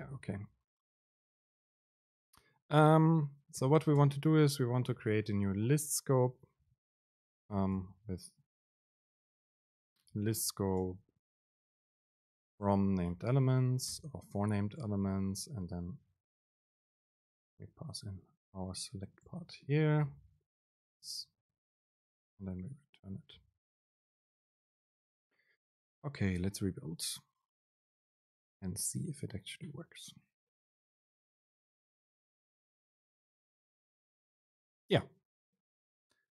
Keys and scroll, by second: 0.3 BackSpace, 1.2 Up, 1.6 Return, 4.1 Return, 4.3 super+space, 7.6 BackSpace, 8.7 Return, 11.1 super+space, 14.4 Down, 15.2 Left, 15.6 End, 15.9 Left, 17.3 super+x, 18.0 Up, 18.8 End, 19.4 Left, 19.6 super+v, 20.0 Down, 20.2 BackSpace, 20.7 Up, 21.0 End, 22.4 shift+Left, 23.8 BackSpace, 33.9 super+space.